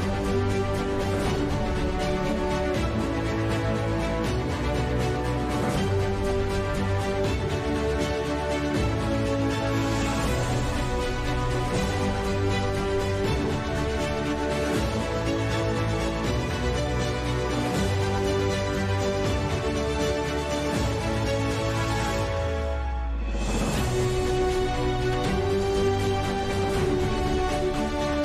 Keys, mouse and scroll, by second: 0.2 middle click, 1.6 right click, 1.7 Tab, 2.2 KP_7, 2.4 KP_5, 3.6-4.9 right drag, 5.3 right click, 6.4 shift+s, 7.4 Tab, 7.5 shift+a, 8.6 KP_5, 9.2 r, 11.0 r, 13.7 s, 14.3 Tab, 14.4 ctrl+a, 15.3 n, 15.8 Tab, 17.2 r, 17.8 click, 18.3-18.7 right drag, 18.7 drag, 18.9 middle drag, 19.1 s, 19.8-20.2 drag, 20.2 g, 21.3 KP_5, 21.5 KP_7, 22.8-24.4 typing, 26.4 KP_5, 26.6 z, 27.4-28.2 middle drag.